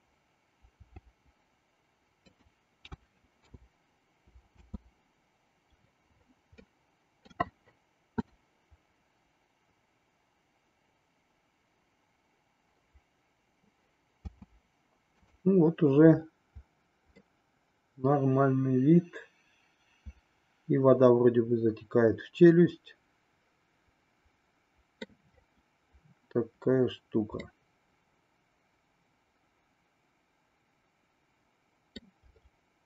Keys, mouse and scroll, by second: 0.9 r, 2.9 a, 3.5 i, 4.5 space, 6.6 middle click, 14.4 space, 15.3 click, 17.1-25.1 middle drag, 27.3-29.9 middle drag, 30.2 middle click, 31.4 middle click.